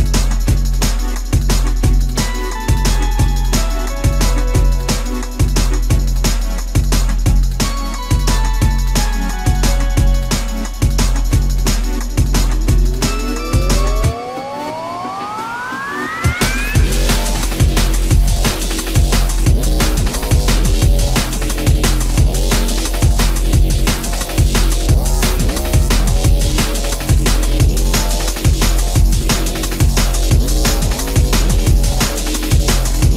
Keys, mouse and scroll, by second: 7.8 shift+middle click, 10.1 space, 10.2 Escape, 15.0 m, 18.2 Escape, 19.3 space, 23.6 e, 26.0 shift+middle click.